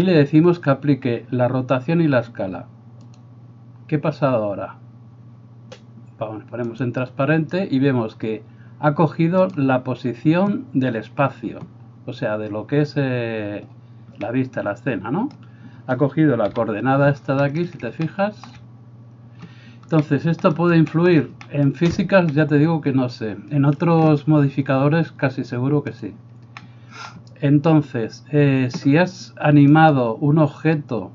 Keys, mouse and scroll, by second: 6.8 click, 14.3-31.1 middle drag, 16.5 KP_7, 26.0 click, 29.8 right click.